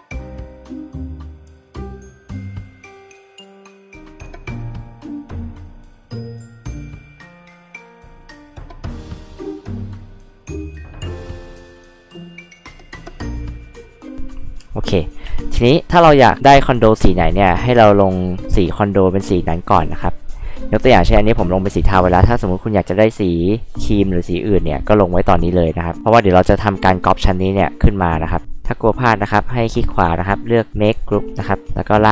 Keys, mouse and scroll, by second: 0.6 f, 0.8 click, 0.9 click, 1.2 ctrl+z, 1.5 click, 2.7 click, 2.9 click, 3.3 click, 3.7 ctrl+z, 3.9 click, 4.7 r, 5.0 click, 5.5 click, 6.3 click, 7.2 click, 7.5 b, 7.6 click, 7.9 h, 7.9 drag, 9.2 click, 10.1 b, 11.1 click, 12.5 click, 15.2 space, 19.7 b, 29.4 right click, 31.0 click, 31.9 ctrl+click.